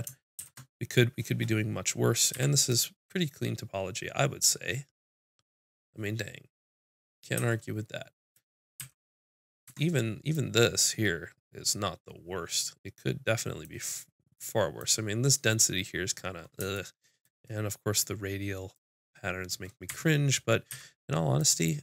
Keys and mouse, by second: 0.4 shift+c, 2.3 z, 7.3 z, 8.2 click, 8.8 z, 8.9 click, 9.7 Tab, 13.9-16.8 middle drag, 19.9 Tab, 20.7 z.